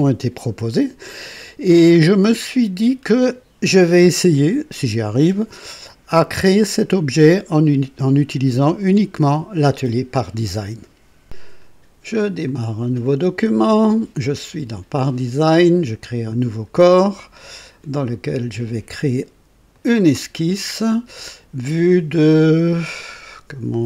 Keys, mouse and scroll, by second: 0.4 scroll up 2, 1.8-7.6 drag, 12.4 click, 15.9 click, 19.7 click.